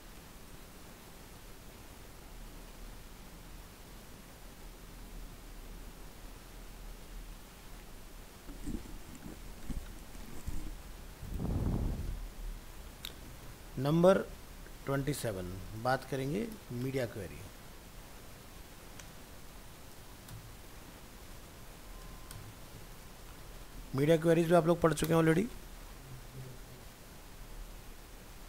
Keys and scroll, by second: 11.7 alt+f, 11.8 alt+释, 15.9 ctrl+shift+Left, 23.4 ctrl+shift+Left, 24.4 ctrl+c.